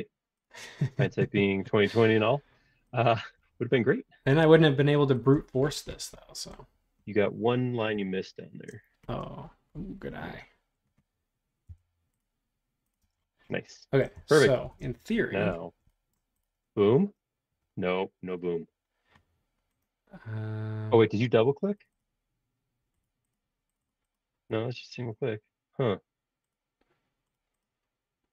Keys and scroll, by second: 5.3 space, 11.7 l, 13.0 space, 14.7 shift+g.